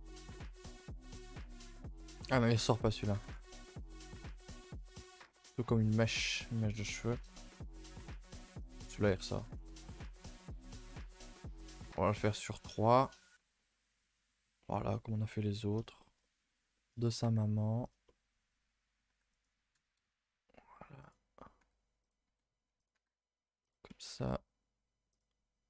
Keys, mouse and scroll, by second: 0.0-0.3 scroll down 1, 0.3-3.1 middle drag, 3.1 r, 4.3 g, 5.0 r, 6.2 middle click, 6.5 a, 6.6 a, 6.8 KP_0, 7.2 Tab, 7.8 scroll up 1, 7.9 a, 8.0 a, 9.1 shift+middle drag, 9.4 scroll up 1, 9.5 Tab, 9.7 shift+middle drag, 10.0 a, 10.1 a, 10.7 click, 11.1 2, 12.2 click, 12.7 shift+click, 13.0 shift+click, 14.9 middle click, 15.4-16.0 scroll up 8, 16.0 shift+middle click, 16.4-16.7 scroll up 4, 16.7 shift+middle click, 17.2 e, 18.0-19.1 middle drag, 19.1 g, 20.0 KP_0, 21.0 click, 21.6 g, 22.3 r, 22.9 g, 24.0 e.